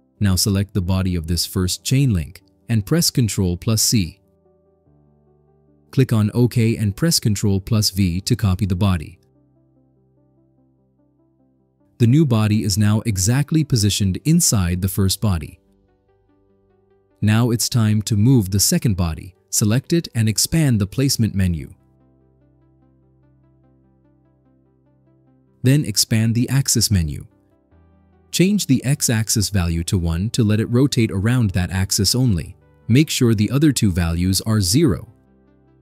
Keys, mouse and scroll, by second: 1.6 click, 2.9 ctrl+c, 7.0 click, 8.8 click, 10.7 ctrl+v, 13.5 click, 14.2 click, 14.6 click, 17.0 click, 18.6 click, 18.8 click, 24.4 click, 28.1 click, 30.1 click, 30.5 1, 32.4 click, 33.5 0, 34.6 click.